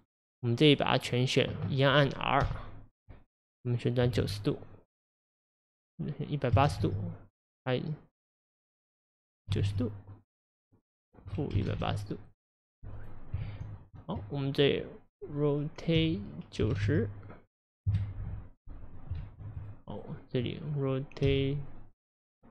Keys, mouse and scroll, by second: 1.0 click, 2.4 r, 13.4 ctrl+z, 16.0 r, 19.2 ctrl+z, 19.7 click, 20.4 click, 21.3 r.